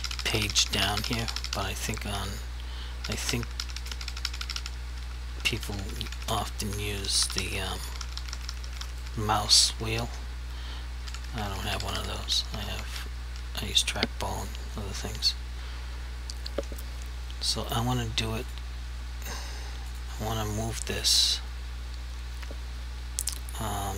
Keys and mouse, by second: 5.0 Page_Up, 6.8 Page_Down, 9.4 Page_Up, 12.6 Page_Down, 13.4 Page_Up, 15.3 right click, 18.5 click.